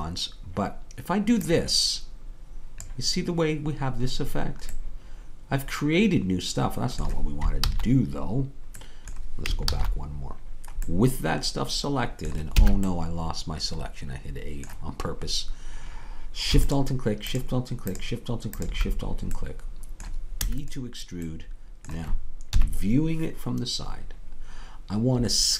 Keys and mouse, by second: 1.5-3.2 drag, 4.9-7.6 middle drag, 7.6 ctrl+z, 8.5-11.5 middle drag, 12.6 a, 18.2-20.4 drag, 20.4 e, 22.6 KP_3.